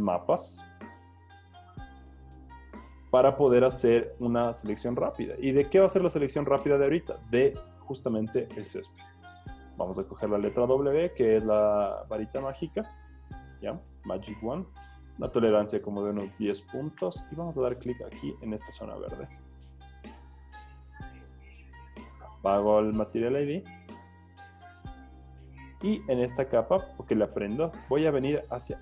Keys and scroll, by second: 10.0 w, 16.1-17.0 typing.